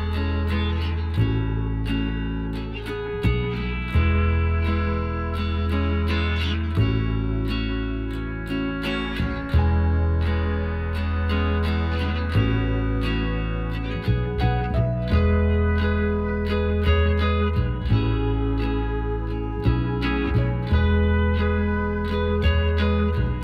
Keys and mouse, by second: 0.9 z, 1.5 click, 2.1 right click, 3.6 middle click, 5.2-7.3 middle drag, 8.3 Tab, 9.4-11.5 drag, 13.6-15.4 right drag, 14.7-16.4 drag, 17.3-19.0 drag, 19.9-21.7 drag, 21.9-23.4 middle drag, 23.2 z.